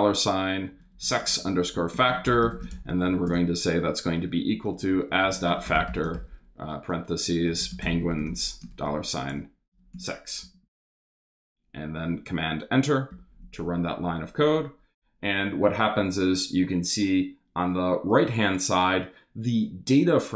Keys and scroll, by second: 0.0-10.4 typing, 11.4 super+Return, 13.1 super+Return.